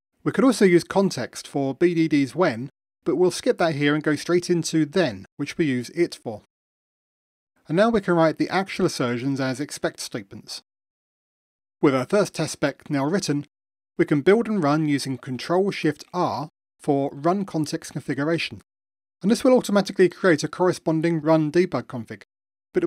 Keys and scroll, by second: 2.4 Return, 13.4 ctrl+shift+r.